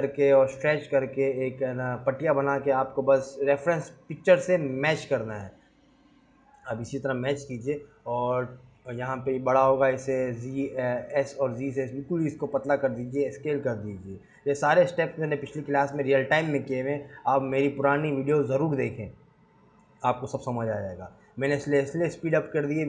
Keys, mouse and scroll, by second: 0.2 g, 0.8 shift+d, 1.7 s, 3.3 click, 3.7 scroll down 2, 3.9 scroll up 1, 4.0 s, 6.0-6.5 scroll down 5, 6.4 click, 7.1 click, 7.3 s, 8.5-9.0 scroll up 8, 9.1 s, 10.1 g, 11.1 click, 12.3 click, 12.6 shift+click, 12.9 shift+click, 13.5 shift+click, 13.8-14.2 scroll up 2, 14.2 s, 15.2 scroll down 1, 15.8 g, 16.8 click, 17.1-17.5 scroll down 2, 18.7 shift+click, 18.8 shift+click, 19.1 shift+click, 19.7 ctrl+a.